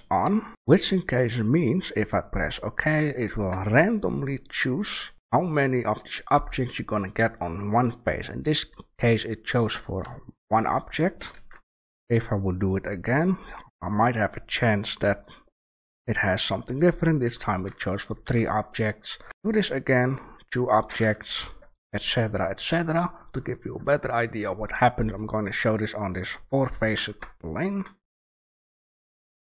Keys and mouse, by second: 3.2-6.1 middle drag, 10.0 Delete, 10.9-12.8 drag, 11.3 shift+a, 15.4-16.3 middle drag, 18.2 Delete, 18.7 click, 19.1 shift+a, 21.2 Delete, 24.7-26.4 right drag, 26.9 shift+a.